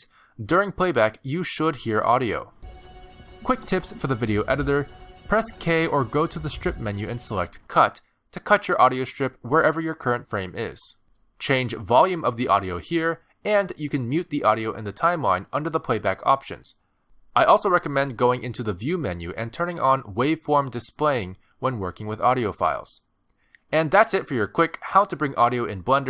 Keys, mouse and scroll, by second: 2.6 space, 7.5 space, 14.0 click, 14.8 click.